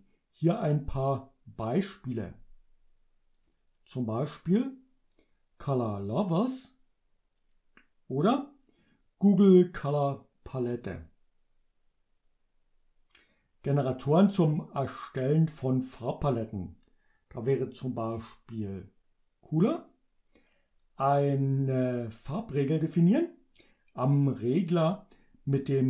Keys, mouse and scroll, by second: 3.5 click, 8.8 click, 18.1 click.